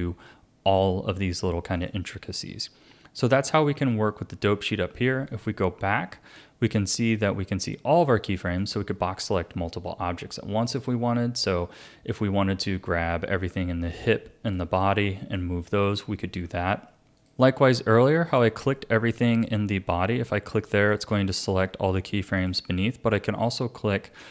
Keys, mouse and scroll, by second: 1.7 click, 5.3 click, 7.2-10.8 drag, 13.8-16.4 drag, 16.4 ctrl+z, 17.2 click, 19.3 click, 20.9 click, 22.4 click.